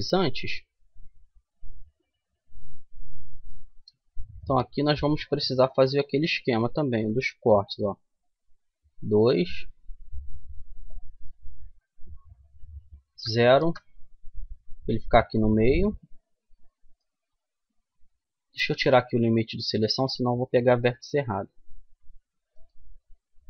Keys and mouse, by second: 0.4-2.3 middle drag, 2.6-5.7 middle drag, 5.7 ctrl+r, 14.5-18.3 middle drag, 19.0-20.7 drag, 20.7 ctrl+r.